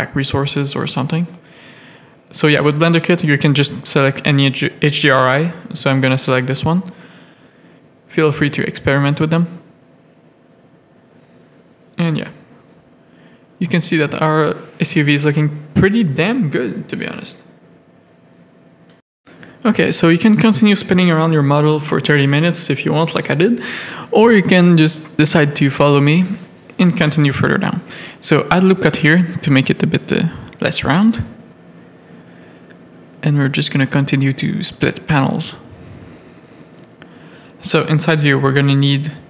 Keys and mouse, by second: 0.0 click, 7.9 click, 9.2 middle click, 9.5 z, 10.9 middle click, 11.6 middle click, 14.4 click, 14.8 click, 15.5 middle click, 16.1 middle click, 16.8-17.9 middle drag, 18.4 middle click, 19.8-22.1 middle drag, 22.4 z, 22.7 middle click, 23.2 click, 23.6 click, 24.0 Tab, 24.2 click, 24.5 middle click, 25.1 shift+middle click, 26.2 Tab, 26.9 ctrl+Tab, 27.0 ctrl+r, 28.2 Tab, 29.2 alt+a, 29.5 z, 30.6-31.9 middle drag, 33.3 click, 35.9 KP_3, 36.5 Tab, 37.3-38.7 shift+middle drag.